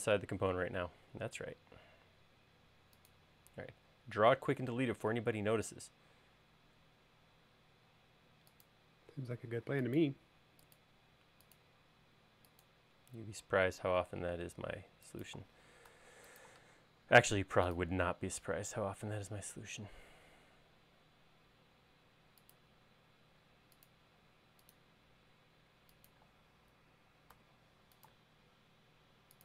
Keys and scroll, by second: 1.7 l, 16.4 a, 23.4 l, 27.9 a.